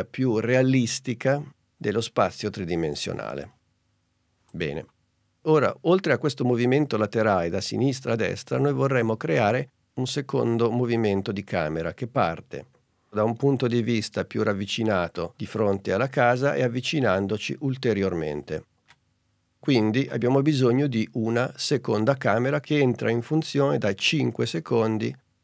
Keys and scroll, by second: 10.7 super+Tab.